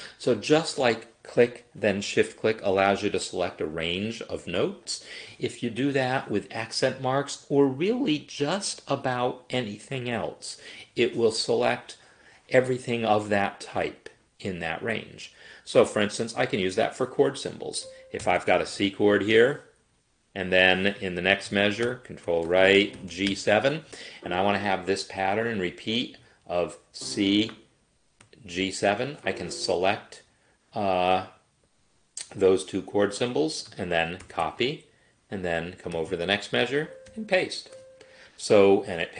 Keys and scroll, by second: 18.2 ctrl+k, 18.6 shift+c, 21.9 ctrl+Right, 22.9 shift+g, 23.2 7, 23.5 Escape, 34.3 ctrl+c, 37.1 ctrl+v.